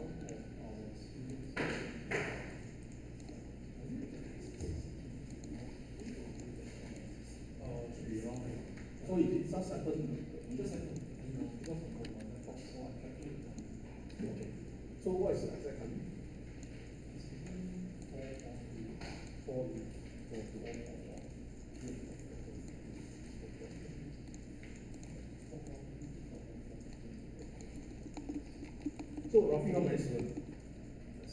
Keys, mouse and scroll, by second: 12.0 ctrl+z.